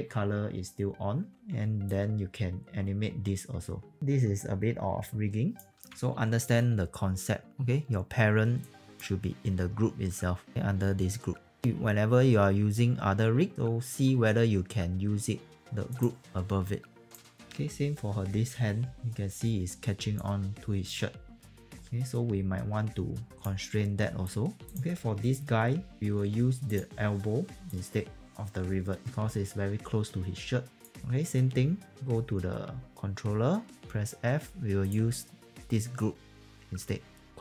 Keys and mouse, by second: 1.8 click, 5.8 q, 7.5 click, 8.5 click, 15.5 click, 20.1 click, 24.2 alt+click, 24.8 click, 26.7 click, 27.3 e, 27.7 click, 29.0 q, 30.8 alt+click.